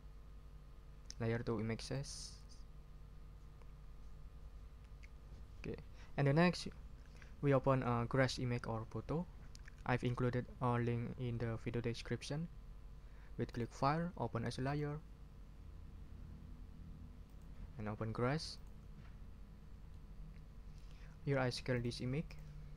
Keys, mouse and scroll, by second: 1.8 click, 13.5 click, 14.6 click, 17.3 click, 18.5 click, 19.9-21.0 drag, 21.7 click, 22.3 click.